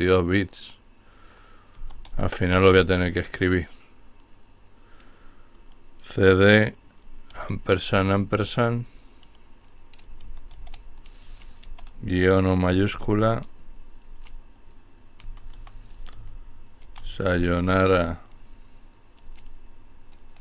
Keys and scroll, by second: 0.8-1.6 typing, 6.9 typing, 9.3-9.7 typing, 10.8 typing, 12.0 typing, 14.1-17.4 typing.